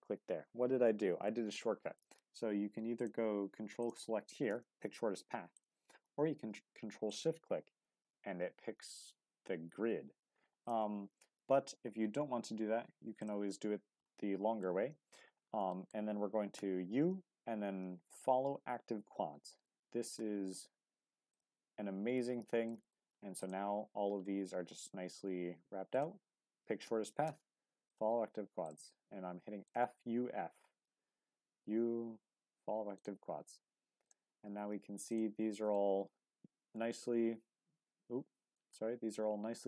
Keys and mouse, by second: 2.9 click, 5.5 click, 10.6 click, 13.2 ctrl+click, 14.6 shift+middle click, 15.7 shift+middle click, 16.5 u, 22.7 shift+middle click, 23.4 click, 25.9 ctrl+click, 26.8 u, 28.6 click, 31.6 u, 35.5 Tab, 35.7-38.6 middle drag, 39.1-39.6 middle drag.